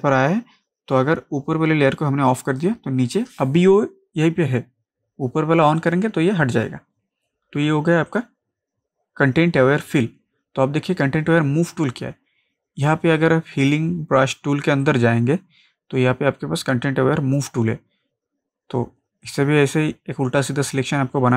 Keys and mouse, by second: 4.6 click, 5.8 click, 8.1 click, 12.9 click, 18.0 click, 19.3-21.3 drag.